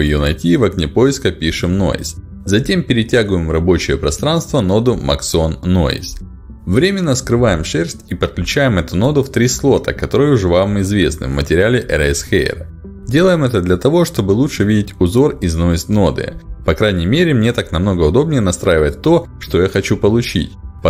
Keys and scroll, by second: 0.7 e.